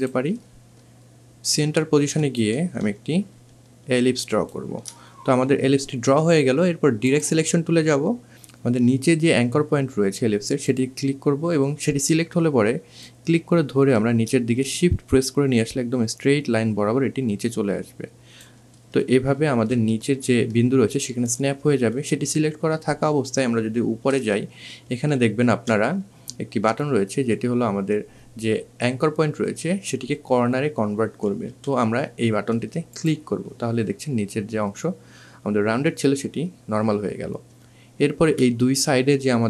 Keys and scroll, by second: 8.3 ctrl+z, 23.9 1, 30.0 2, 30.6 1.